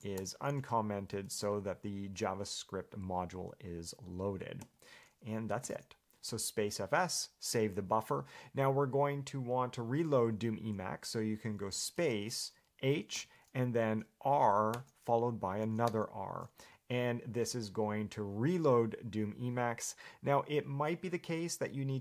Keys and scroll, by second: 0.1 BackSpace, 1.0 Escape, 1.5 shift+v, 4.8 Escape.